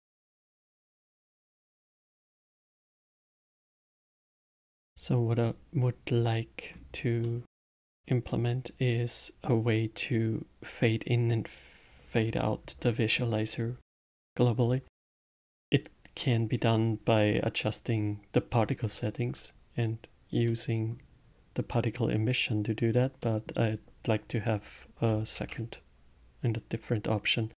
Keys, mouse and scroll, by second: 0.2-3.2 drag, 3.5 middle click, 5.4-6.2 middle drag, 6.2-6.7 scroll up 1, 6.7 scroll up 1, 7.2-8.3 middle drag, 8.3-11.4 drag, 20.4-21.6 middle drag, 21.6-23.2 drag, 23.2-25.3 middle drag, 25.3 shift+a.